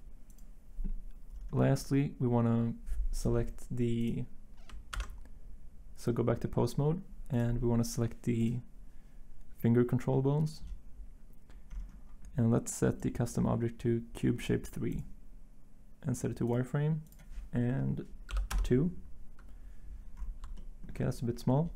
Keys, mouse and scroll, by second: 4.9 ctrl+Tab, 20.2 Return, 20.3 Return.